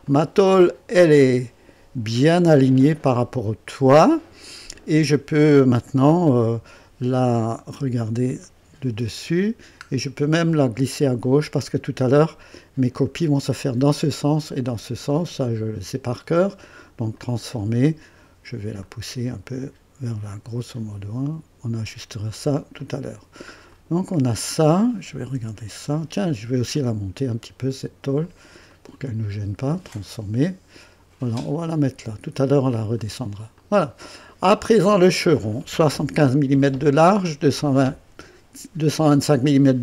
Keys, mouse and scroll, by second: 0.0-5.5 drag, 7.7 KP_2, 8.4-9.1 right drag, 9.3 scroll down 1, 16.5 right click, 17.2 click, 18.8-21.8 drag, 22.8 click, 23.7 click, 25.4 3, 26.3 scroll up 1, 26.8 right click, 28.0-28.7 typing, 28.2 click, 28.7 right click, 29.6 click, 31.2-32.3 drag, 33.0 click, 33.6 click, 34.1-35.2 drag.